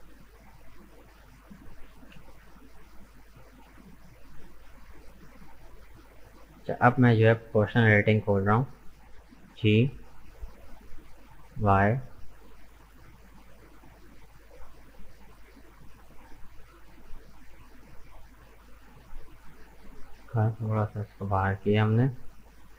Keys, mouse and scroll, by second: 0.2 shift+right click, 0.9 shift+right click, 1.7 shift+middle click, 2.5 shift+right click, 3.0 shift+right click, 3.3-4.2 scroll down 3, 4.2 shift+right click, 4.7 shift+right click, 5.2 shift+right click, 6.0 shift+right click, 7.3 click, 7.8-9.5 middle drag, 9.5 g, 19.0 scroll up 3, 19.2-20.2 middle drag, 20.2-20.6 scroll down 2, 20.6-22.2 middle drag, 22.2 scroll up 1, 22.4-22.7 middle drag.